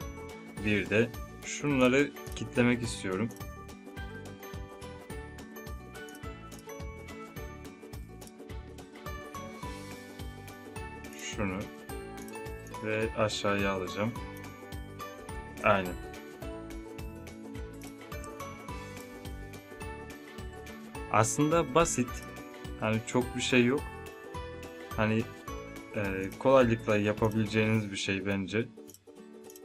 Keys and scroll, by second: 18.3 space, 19.3 space.